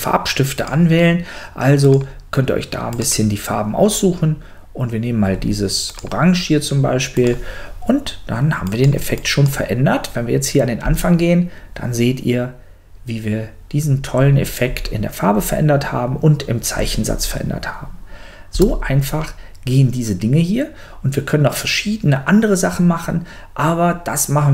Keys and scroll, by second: 10.8 space, 18.5 space.